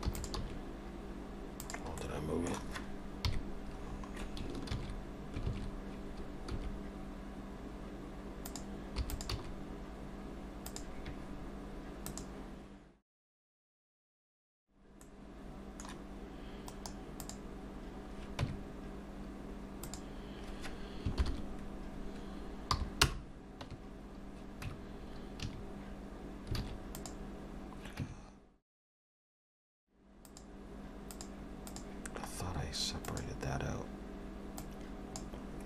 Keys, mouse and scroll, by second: 0.2 e, 0.5 s, 2.0 middle click, 3.3 KP_3, 3.9-4.4 scroll up 4, 4.7 ctrl+z, 5.5 ctrl+z, 6.5 s, 9.0 e, 9.3 s, 12.4 click, 14.5 Tab, 15.0 middle click, 16.7 right click, 18.5 Tab, 19.9 click, 21.2 ctrl+l, 22.7 p, 23.7 Tab, 24.7 Tab, 25.5 a, 26.6 alt+a, 27.0 click, 28.1 Tab, 29.3 scroll down 1, 30.3 click, 32.3-33.1 scroll down 2, 33.1 click, 33.1 scroll down 2, 34.6 click.